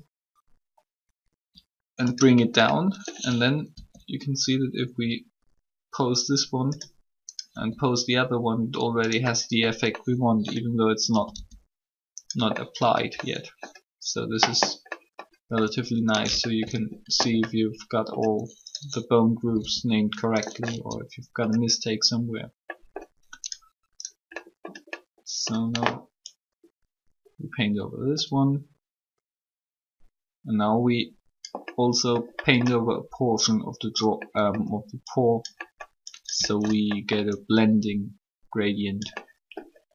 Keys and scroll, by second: 3.7 r, 7.5 r, 11.1 typing, 19.4 typing.